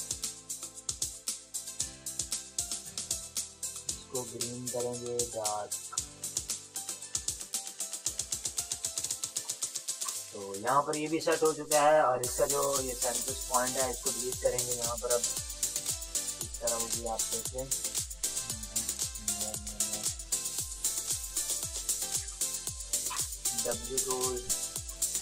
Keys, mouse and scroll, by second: 0.5-9.2 drag, 9.2 Return, 9.6 ctrl++, 10.0 space, 10.1 click, 10.4 ctrl+-, 10.8 click, 12.0 shift+w, 12.9 ctrl+=, 13.1 ctrl+click, 13.9 click, 15.3 ctrl+d, 17.5 click, 17.5 click, 18.5 ctrl+d, 18.9 click, 20.1 shift+F7, 22.0 ctrl+d, 23.0 ctrl+space, 23.1 click, 23.9-25.2 typing.